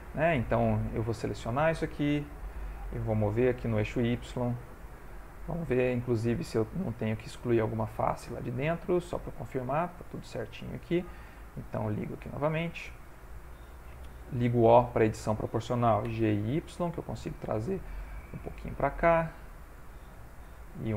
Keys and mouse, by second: 0.0 ctrl+middle click, 1.0 click, 2.1 g, 5.0 middle click, 6.5 shift+middle click, 7.2 middle click, 9.0 click, 9.6 middle click, 12.2 click, 12.9 middle click, 14.4 o, 16.1 g, 17.7 middle click, 19.2 click, 19.6 g.